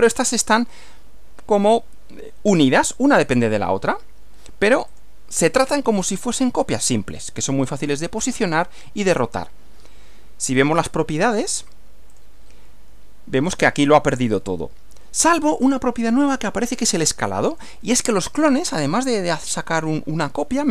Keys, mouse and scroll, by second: 4.9 click, 6.1-7.6 middle drag, 7.8-9.2 middle drag, 10.6 click, 12.1 click, 17.5 click, 18.4-19.3 middle drag.